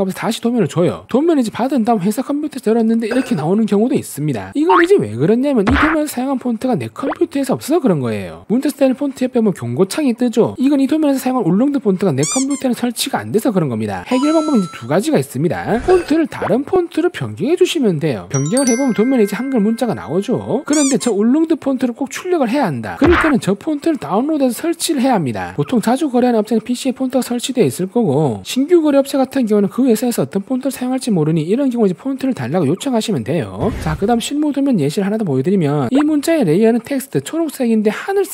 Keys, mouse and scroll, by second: 1.3 scroll up 1, 1.6 middle click, 4.6 click, 4.9 scroll up 1, 4.9 scroll down 2, 5.4 click, 5.8-6.6 typing, 6.3 right click, 17.0 click, 17.9 click, 18.5 click, 20.0 middle click, 20.6 middle click, 22.3 scroll up 1, 22.6 middle click, 23.1 middle click, 23.7 scroll up 1, 24.2 middle click, 25.0 scroll up 1, 25.4 middle click, 26.7 middle click, 27.4 scroll up 1, 27.9 middle click, 28.4 middle click, 29.1 middle click, 29.9 middle click, 33.8 s, 34.5 middle click, 35.7 click, 35.7 right click.